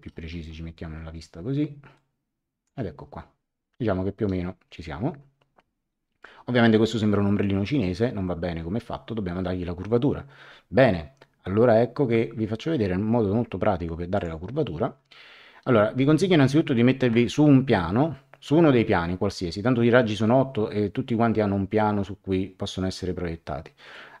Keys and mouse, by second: 1.9 click, 14.1 click.